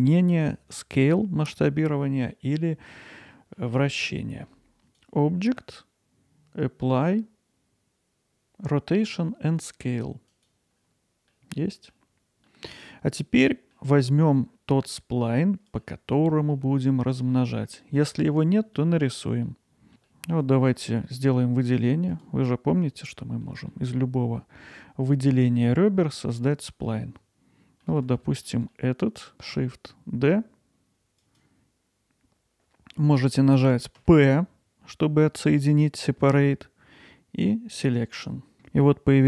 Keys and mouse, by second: 3.6-4.0 middle drag, 4.8 Tab, 4.8-10.5 drag, 11.3-11.9 middle drag, 12.5-12.8 middle drag, 13.4 middle click, 14.3-14.8 middle drag, 15.4-15.8 middle drag, 16.6 alt+middle click, 17.5-18.1 ctrl+alt+middle drag, 18.3-19.3 alt+middle drag, 19.5-19.9 middle drag, 19.9 alt+Tab, 20.1 middle click, 20.6 alt+middle click, 23.1 middle click, 23.7-25.4 alt+middle drag, 25.7-26.4 middle drag, 26.8-28.5 alt+middle drag, 28.7 alt+middle click, 29.5 shift+d.